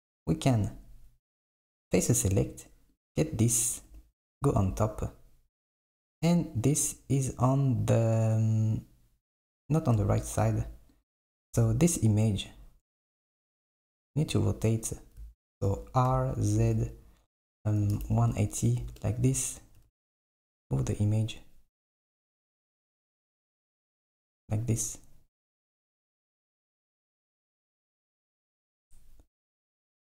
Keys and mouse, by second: 1.4-3.1 drag, 3.9 KP_7, 10.2 Tab, 10.6 Tab, 11.0 click, 11.6 Tab, 12.0 click, 13.1 KP_7, 16.2 r, 19.9 g, 26.7 g.